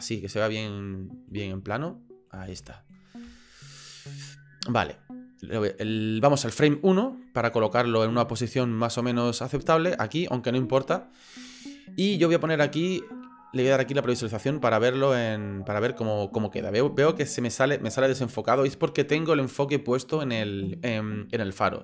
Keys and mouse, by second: 1.0-2.3 shift+drag, 2.5 ctrl+click, 3.3 shift+click, 5.8 click, 6.9 click, 8.5-9.7 drag, 13.9 click, 14.9 right click.